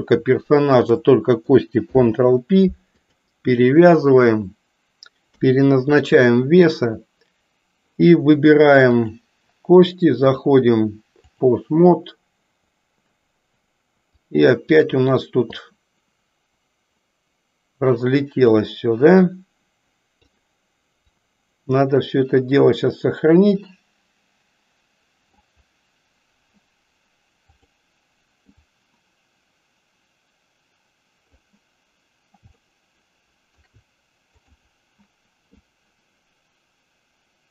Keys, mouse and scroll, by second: 1.8 ctrl+p, 5.3 KP_3, 10.2-11.4 drag, 14.2 click, 15.6-18.7 drag, 19.2-20.3 drag, 21.2-25.4 drag, 27.4 click, 28.5-31.4 drag, 32.5-33.7 shift+middle drag, 34.3 click, 35.7-37.5 drag.